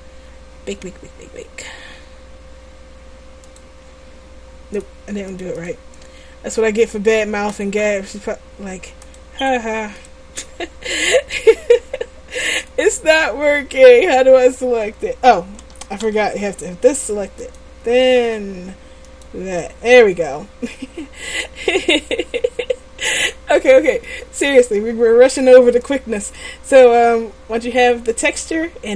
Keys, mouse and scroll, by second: 3.5-4.8 drag, 7.4-8.5 drag, 9.1-11.1 drag, 15.7 a, 16.1 a, 27.7-28.9 middle drag.